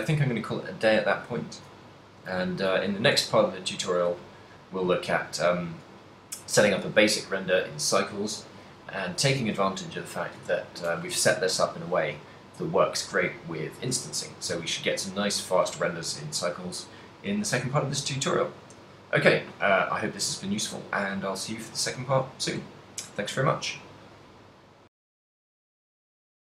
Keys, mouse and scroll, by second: 0.1 a, 1.3 middle click, 2.3 shift+middle click, 2.4 ctrl+middle click, 4.9 middle click, 6.0 middle click.